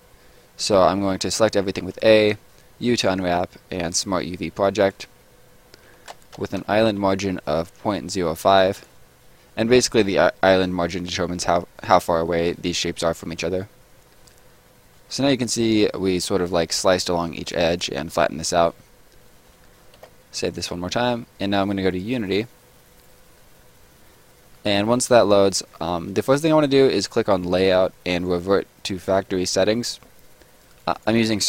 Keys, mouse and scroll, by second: 1.8 u, 3.9 click, 6.9 5, 8.5 click, 14.1 middle click, 19.1 middle click, 20.0 ctrl+s, 20.4 click, 27.3 click, 29.7 click.